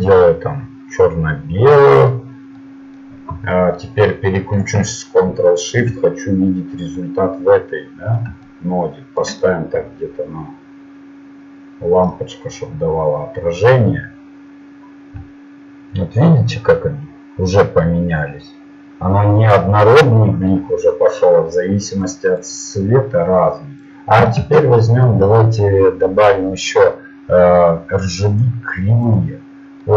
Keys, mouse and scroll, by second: 1.1 middle click, 5.6-7.9 drag, 22.0-24.4 drag, 27.5-29.4 drag.